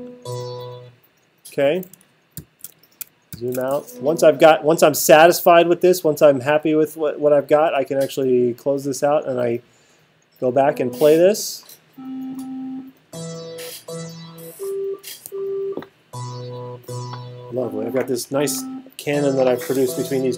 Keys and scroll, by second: 2.4 alt+super+8.